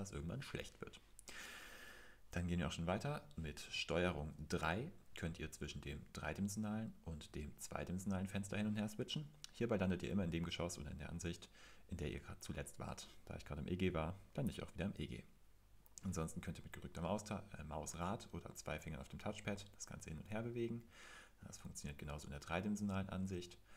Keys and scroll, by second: 4.3 super+3, 7.1 super+2.